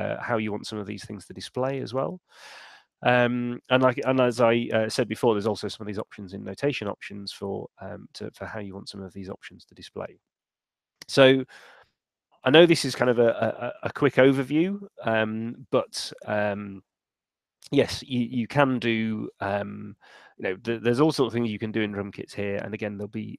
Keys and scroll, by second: 2.6 Escape, 4.1 shift+super+n.